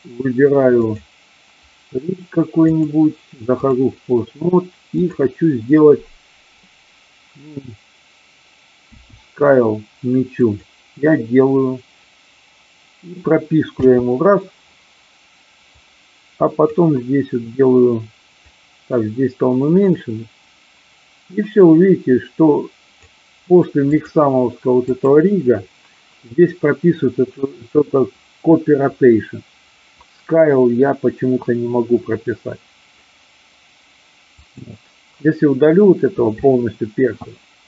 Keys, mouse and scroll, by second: 0.8 click, 2.5-3.8 drag, 5.0 click, 10.5 click, 13.6 i, 15.8-16.8 drag, 18.4-23.0 drag, 23.9 click, 24.8 click, 34.3-35.3 drag.